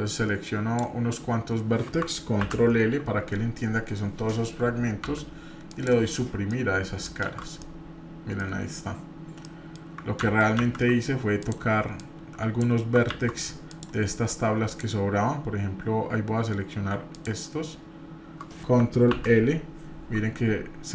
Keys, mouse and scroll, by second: 2.4 ctrl+l, 5.0 Delete, 6.5 middle click, 7.2 shift+z, 7.6 middle click, 8.6 scroll up 2, 9.4 middle click, 10.2 ctrl+z, 11.4 click, 12.0 click, 13.1 ctrl+z, 13.7 click, 14.7-15.7 shift+drag, 19.1 ctrl+l.